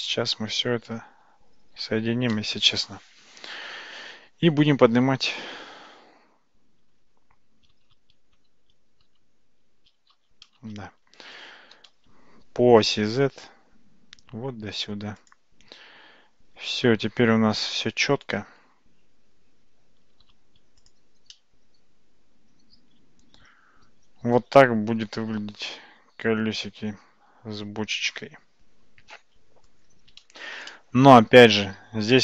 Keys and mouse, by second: 1.7 ctrl+j, 8.0 shift+z, 8.7 shift+z, 9.3 alt+z, 10.3 alt+z, 11.8 g, 18.6 Tab, 19.3 Tab, 20.4 shift+z, 20.8 click, 21.3-29.7 middle drag, 30.7-31.5 shift+middle drag.